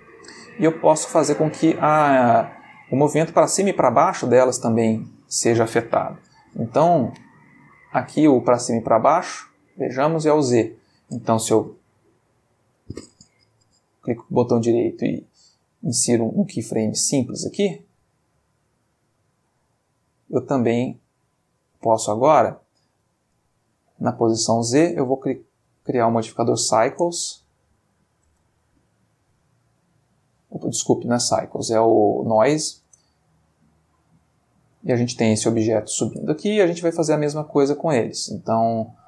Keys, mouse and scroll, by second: 0.3-1.5 ctrl+middle drag, 2.3 click, 3.1 g, 4.2 Escape, 6.8 n, 9.3-10.7 drag, 10.3 Escape, 11.7 i, 13.4 ctrl+z, 14.0 ctrl+right click, 15.7 click, 17.2 click, 18.3 right click, 18.9 click, 19.8 click, 21.0 right click, 21.4 click, 23.2 click, 23.8 click, 25.1 click, 25.8 click, 26.9 space, 27.5 space, 29.4 click, 30.8 click, 31.3 click, 32.3 click, 32.8 space, 36.1 space, 36.5 click, 37.9 click.